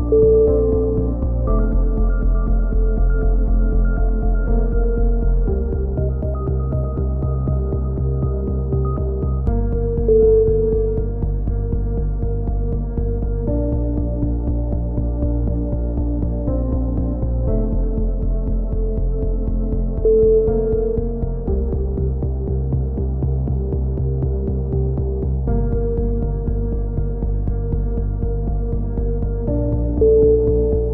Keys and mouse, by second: 0.5 x, 1.2 a, 1.9 ctrl+r, 3.1 a, 3.4 Tab, 3.8 z, 4.1 z, 4.4 Tab, 4.8 z, 6.2 z, 6.4 z, 6.9 alt+h, 7.1 z, 7.2 a, 8.0 ctrl+l, 9.7-11.0 drag, 11.2 click, 11.9-12.9 drag, 13.3 a, 13.5-14.4 drag, 15.2 Tab, 15.5-16.0 middle drag, 19.8-20.5 middle drag, 20.5 Tab, 20.5 middle click, 20.7 z, 23.3 x, 24.5 z, 25.3 click, 26.6 k, 29.2 a, 29.5-30.9 drag.